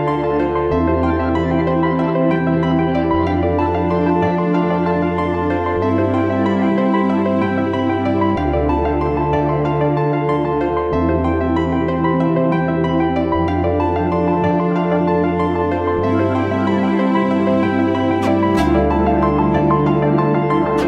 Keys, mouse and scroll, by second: 1.7 right click, 3.6-4.4 typing.